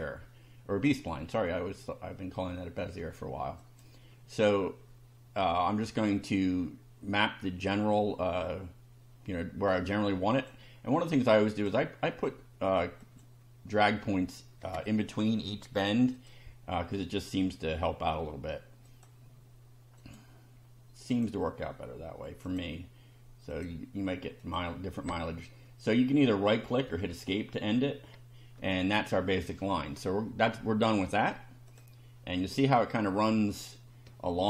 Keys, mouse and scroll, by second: 3.6 click, 7.7 click, 10.3 click, 11.5 click, 13.0 click, 14.8 click, 16.1 click, 18.9 click, 20.0 click, 21.1 click, 22.5 click, 23.5 click, 24.4 click, 26.9 Escape, 31.7 click, 32.7-33.7 middle drag, 34.0-34.4 shift+middle drag.